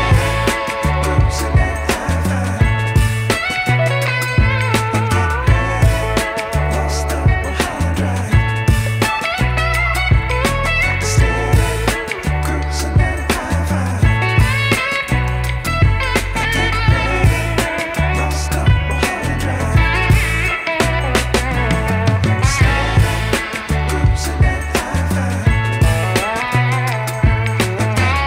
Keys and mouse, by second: 0.1 typing, 0.3 click, 3.9-4.5 typing, 4.1 click, 4.7 click, 7.6 typing, 7.8 click, 8.8 ], 8.9 click, 10.3 [, 10.5 click, 12.3 typing, 12.8 click, 14.1 ], 14.4 click, 14.7 ], 15.1 click, 16.6 ], 16.7 click, 16.7 ], 18.0-19.8 typing, 19.2 click, 20.2 click, 20.9-28.2 typing, 21.2 click, 21.6 click, 22.5 click, 23.3 click, 23.8 click, 24.7 click, 25.4 click, 26.1 click, 27.4 click.